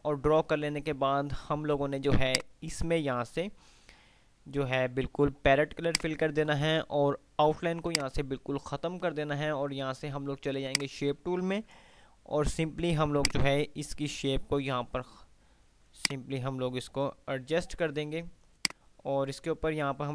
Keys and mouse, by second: 6.1 click, 8.1 right click, 10.6 click, 11.7 ctrl+q, 13.4-16.1 drag, 16.1-17.4 ctrl+drag.